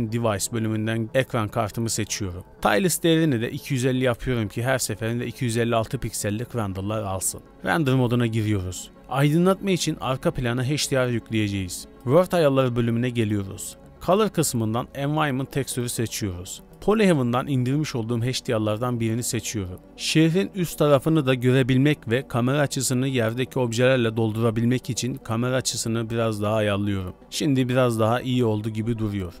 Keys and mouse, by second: 2.9-6.1 drag, 7.5 z, 13.8-14.6 drag, 20.7 z, 22.5 g, 25.4 r, 27.5 click, 28.3-29.4 shift+middle drag.